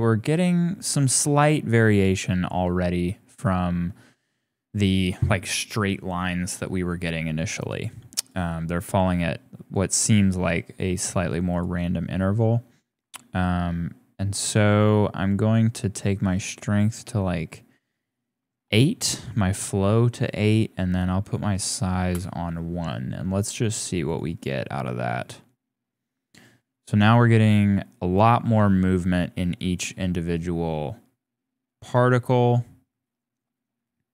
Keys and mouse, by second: 7.6 click, 8.2-21.2 drag, 21.6 click, 24.0 click.